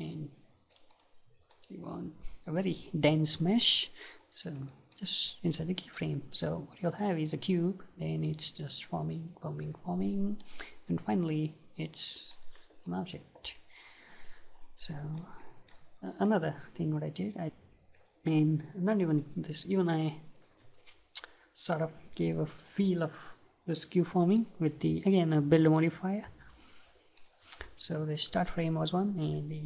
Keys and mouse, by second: 0.7-3.8 drag, 4.6-7.6 right drag, 13.6-17.1 middle drag, 16.3-17.4 right drag, 18.0-20.0 right drag, 24.4-27.0 drag, 29.3-29.6 drag.